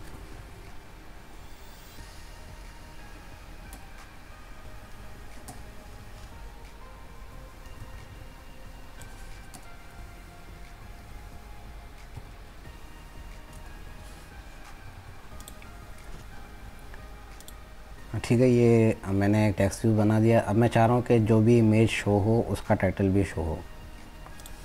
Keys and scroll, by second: 14.8 ctrl+z.